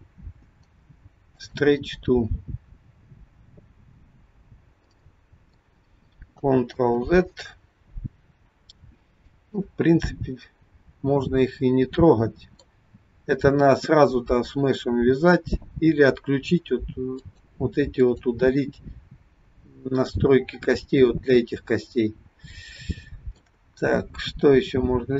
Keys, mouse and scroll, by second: 5.0 middle click, 6.4 ctrl+click, 6.8 ctrl+z, 9.1 middle click, 14.6-17.2 scroll up 1, 17.2 click, 18.0 click, 22.1 scroll down 1, 22.8 shift+middle click.